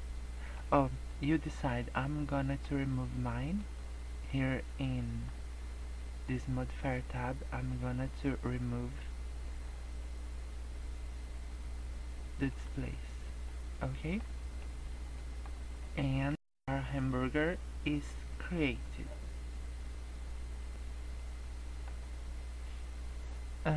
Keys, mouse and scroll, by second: 2.3 middle click, 3.5 click, 7.1-7.7 scroll up 2, 7.7-9.5 scroll down 6, 9.5 scroll up 1, 10.2-11.8 scroll up 3, 12.4 click, 13.3 middle click, 14.5 middle click, 15.1 middle click, 21.1 middle click, 22.0 scroll down 3, 22.3 scroll up 2, 23.0-23.7 scroll up 1.